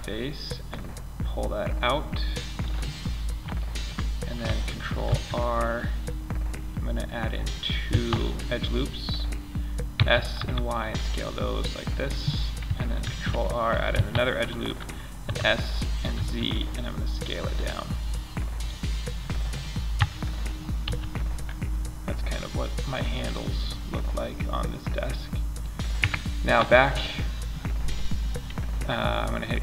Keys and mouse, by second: 0.0-1.4 drag, 4.4 ctrl+r, 9.3 s, 11.5 click, 12.3 ctrl+r, 14.6 s, 19.2 KP_5, 20.2 z, 21.3-21.9 middle drag, 22.3 middle click, 22.5 middle click, 22.6-23.6 middle drag, 23.8-24.2 middle drag, 24.2 middle click, 25.3 Tab.